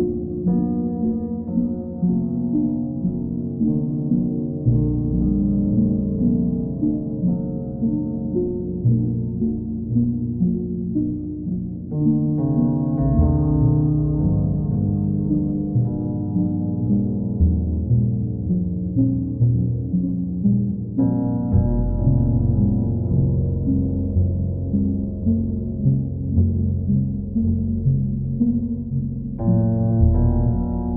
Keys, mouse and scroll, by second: 0.2 click, 1.0 alt+click, 2.1 alt+click, 3.4 ctrl+click, 4.5 ctrl+click, 6.1 ctrl+click, 6.6 ctrl+click, 9.4 click, 10.0 alt+click, 11.0 click, 11.8 shift+click, 12.6 alt+click, 15.1 click, 15.6 shift+click, 16.3 alt+click, 16.9 click, 17.5 click, 18.6 ctrl+click, 19.2 alt+click, 19.6 click, 21.8 click, 22.5 click, 23.3 click, 23.8 shift+click, 24.5 alt+click, 27.1 q.